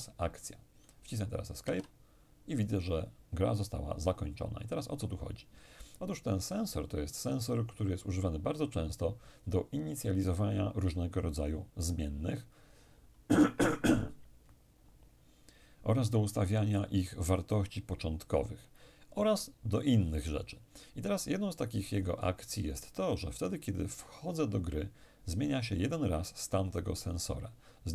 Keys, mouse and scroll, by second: 1.6 Escape.